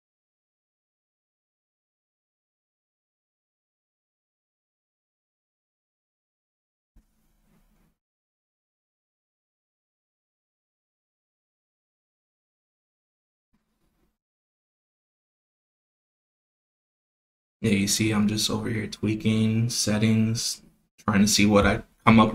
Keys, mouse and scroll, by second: 0.0 click, 1.0 click, 1.5-2.3 drag, 5.6-8.7 drag, 9.1 click, 10.3 click, 11.3-13.4 drag, 14.1 click, 15.5 click, 16.1-18.4 drag, 19.0 click, 19.3 click, 21.8-22.3 drag.